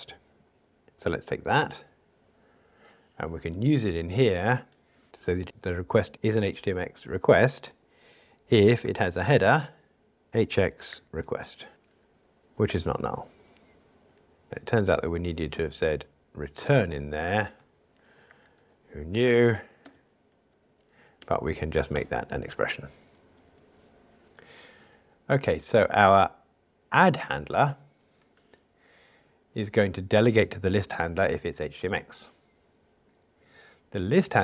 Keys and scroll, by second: 10.3 super+z, 14.4 alt+Return, 19.2 Escape, 21.1 alt+Return.